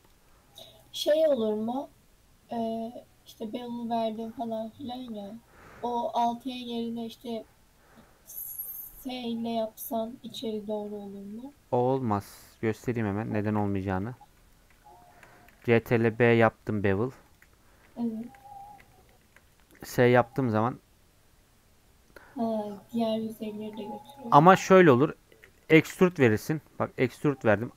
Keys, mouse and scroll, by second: 0.0 click, 0.3-12.4 middle drag, 12.4 Tab, 12.5-12.9 scroll up 1, 12.9 middle click, 13.5 ctrl+r, 14.2 middle click, 14.5 scroll up 1, 14.8 shift+middle click, 15.5 ctrl+b, 17.7-18.7 middle drag, 18.7 scroll up 1, 18.9 shift+middle click, 19.8 s.